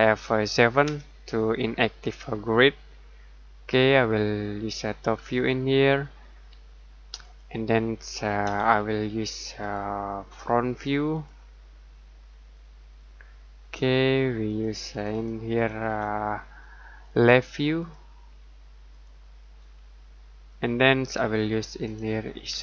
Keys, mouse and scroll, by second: 0.8 F7, 2.1-4.3 scroll down 1, 5.1 middle click, 8.4 F7, 9.6 click, 12.1-12.9 scroll down 1, 12.9 middle click, 15.8 F7, 17.7 click, 19.7-20.5 scroll down 1, 20.5 middle click, 22.5 F7.